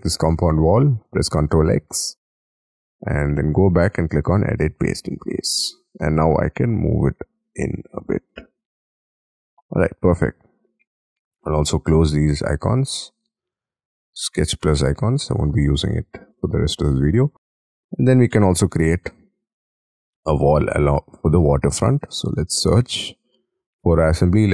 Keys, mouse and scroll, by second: 1.1 ctrl+x, 1.8 Escape, 2.1 Escape, 6.0 scroll up 4, 6.2 m, 8.0 shift+click, 8.2-8.7 shift+scroll down 7, 9.0 middle click, 16.4-16.9 scroll down 10, 17.0 shift+middle click, 17.7-18.3 scroll up 13, 18.4 shift+middle click, 18.7 shift+scroll down 1.